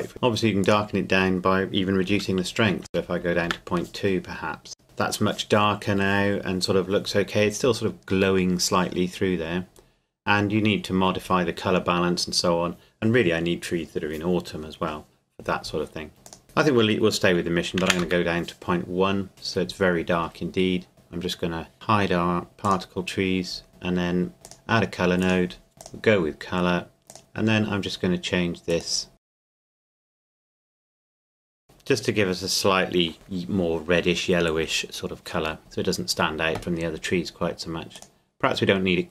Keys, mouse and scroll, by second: 0.1 Delete, 2.4 KP_Decimal, 2.9 KP_2, 3.5 KP_Enter, 16.3 click, 17.7 KP_Decimal, 17.8 KP_1, 18.0 KP_Enter, 20.9 right click, 21.7 Escape, 22.7 click, 24.4 click, 25.8 click, 35.6 right click, 37.9 right click.